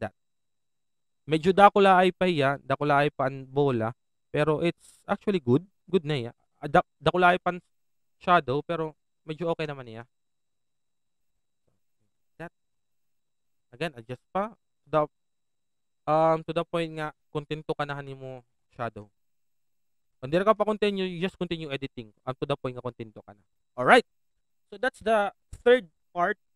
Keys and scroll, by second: 7.2 alt+shift+f, 9.6 Down, 18.0 shift+Return, 18.4 Down, 20.9 Right, 20.9 Down.